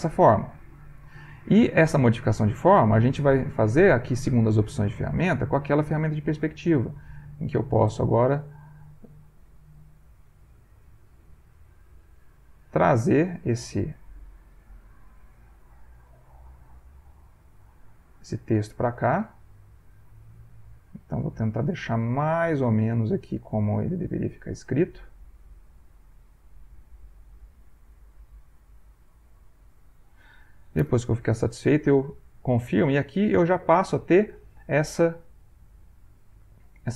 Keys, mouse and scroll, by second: 0.5 ctrl+click, 2.5 ctrl+click, 2.6 ctrl+middle click, 3.6 click, 5.2 click, 6.4 ctrl+middle click, 7.5-9.6 drag, 9.7 middle click, 10.8-12.1 drag, 12.6-14.7 drag, 15.4 click, 17.0-18.3 drag, 18.9-21.8 drag, 22.2-24.7 drag, 25.2-26.7 drag, 27.3-29.7 drag, 30.8 Return, 31.8-32.9 drag, 33.0 ctrl+click, 33.5-34.9 ctrl+drag.